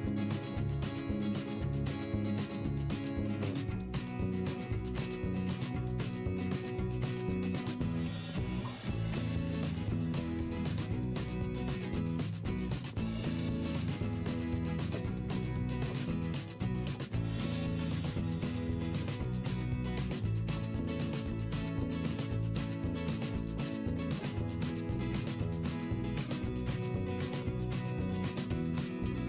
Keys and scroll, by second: 11.0 p, 14.0 shift+v, 16.3 v, 21.1 p, 25.3 i, 26.5 v, 26.9 p.